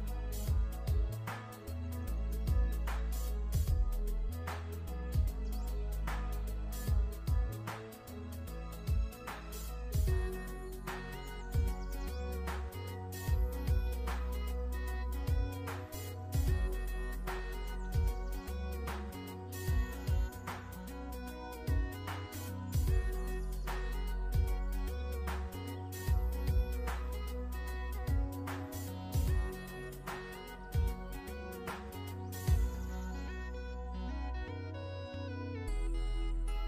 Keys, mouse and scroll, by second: 0.1 click, 2.1 i, 2.2 click, 2.5 v, 2.7 click, 5.3 click, 12.0 alt+shift+scroll up 1, 12.8 click, 14.7 alt+click, 15.5 click, 16.0-17.6 alt+shift+scroll down 4, 16.4 click, 17.6 click, 20.4 click, 21.0 click, 24.0 shift+click, 24.6 click, 27.4 ctrl+scroll down 1, 31.3 alt+shift+click, 31.9 click, 34.1 alt+shift+click, 35.1 click.